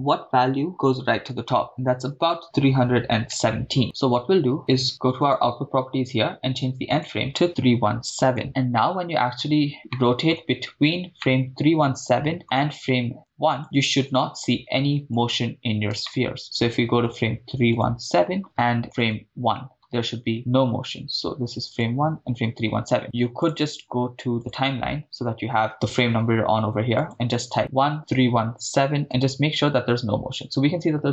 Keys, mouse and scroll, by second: 0.5 Left, 0.7 Left, 0.7 Right, 1.7 Right, 2.4 Left, 3.8 scroll down 2, 5.2 click, 6.9-8.3 drag, 8.4-8.8 scroll down 6, 8.8 middle click, 9.7 scroll down 2, 9.9 middle click, 10.5 scroll down 2, 11.2 scroll down 2, 11.2-12.4 middle drag, 13.5 click, 15.2-16.0 scroll up 2, 16.0 scroll up 2, 16.1-16.4 shift+middle drag, 17.8 drag, 18.5 Right, 19.0 click, 20.3 Left, 21.8 click, 24.5-25.9 drag, 27.0 click, 27.9-29.2 drag.